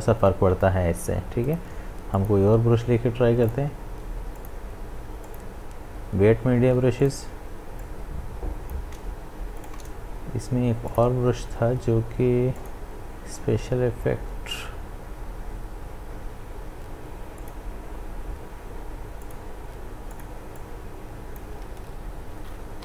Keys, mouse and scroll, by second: 1.6-9.6 drag, 9.6 right click, 10.9 click, 11.2-12.3 scroll down 1, 12.3-12.6 scroll down 1, 12.6 click, 13.3-16.1 scroll down 1, 17.4 click, 21.8 ctrl+z.